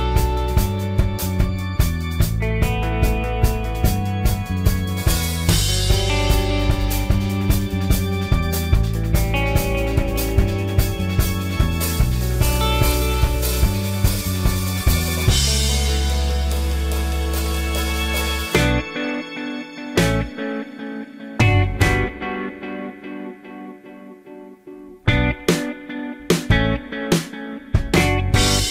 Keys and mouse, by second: 6.9-11.9 drag, 13.7-15.1 drag, 16.3-21.5 middle drag, 17.9 s, 19.0 y, 21.9 middle drag, 22.0 middle click, 22.5-23.5 middle drag, 23.7-24.9 middle drag, 25.7-28.7 middle drag.